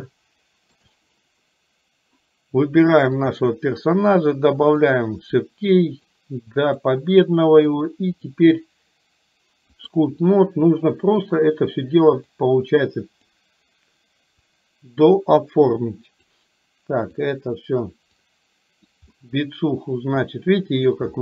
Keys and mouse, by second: 0.1-1.0 shift+middle drag, 4.9 click, 6.3 click, 7.9-10.1 drag, 12.4-13.4 drag, 14.6 click, 15.8 click, 17.3 click, 18.3 click, 19.3-21.0 middle drag.